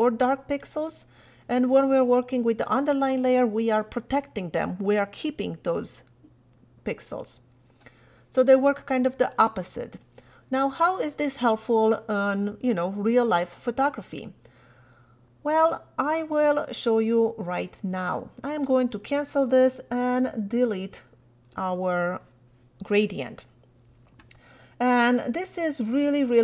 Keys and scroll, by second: 20.5 BackSpace.